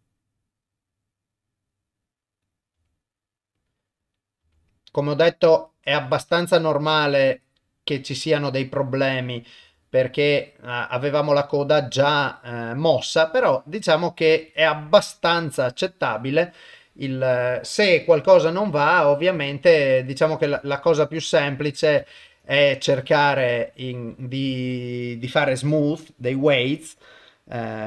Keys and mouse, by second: 2.4 click, 2.7 r, 4.0 click, 4.4 r, 6.4 click, 6.8 r, 9.2 click, 9.6 r, 14.5 click, 14.8 r, 20.2 click, 20.9 ctrl+Tab, 21.6 click, 22.2 ctrl+Tab, 25.9-27.8 drag.